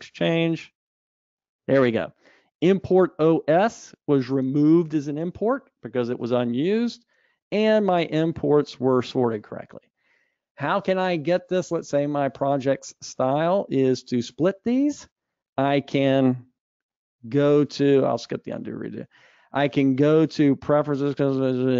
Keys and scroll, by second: 1.1 ctrl+alt+o.